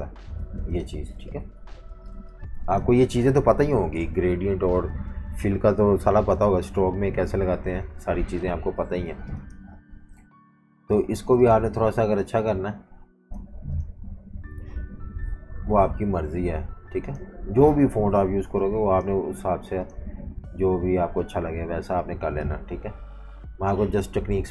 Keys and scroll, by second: 0.4 typing, 1.2 super+-, 1.4 super+-, 1.6 super+-, 2.1 typing, 4.0 F18, 8.0 F19, 9.1 v, 9.2 space, 11.2 typing.